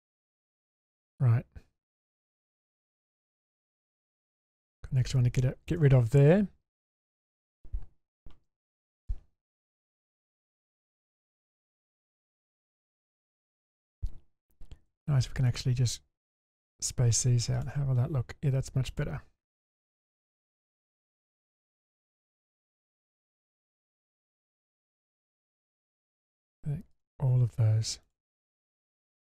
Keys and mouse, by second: 0.0 click, 0.5 middle click, 3.1 alt+click, 4.5 click, 5.5 shift+middle drag, 6.7-7.5 middle drag, 8.5 1, 8.8 click, 9.7 g, 11.2-11.7 middle drag, 12.8 middle click, 14.9 2, 16.4 ctrl+click, 17.5 click, 18.9 click, 19.5 ctrl+click, 20.0 click, 21.0 click, 24.1 middle click, 25.0 click, 28.0 click.